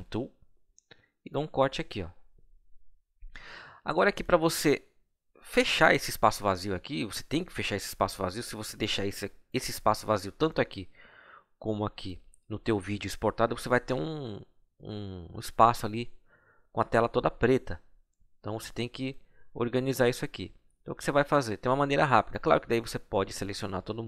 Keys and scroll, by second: 2.1 Delete.